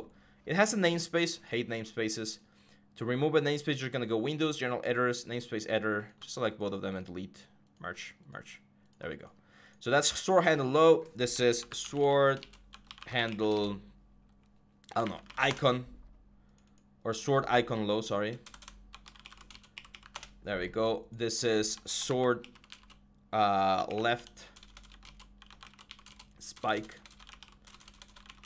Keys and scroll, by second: 11.0-15.6 typing, 17.1-28.4 typing.